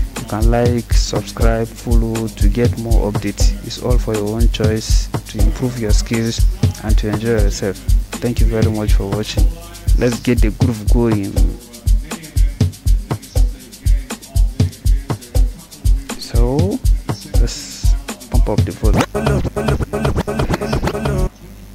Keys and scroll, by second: 17.3 f, 18.7-21.7 typing.